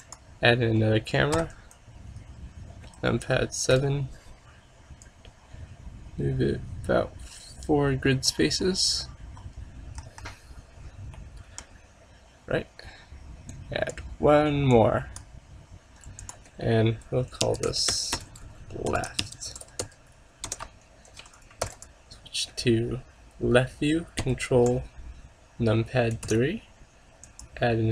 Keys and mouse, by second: 1.4 KP_7, 3.3 KP_5, 3.8 KP_5, 5.1-6.9 drag, 10.1 KP_0, 13.6-15.4 drag, 16.3-18.1 drag, 18.4 BackSpace, 18.5 BackSpace, 21.7 ctrl+s, 24.3 ctrl+KP_3, 26.3 shift+a.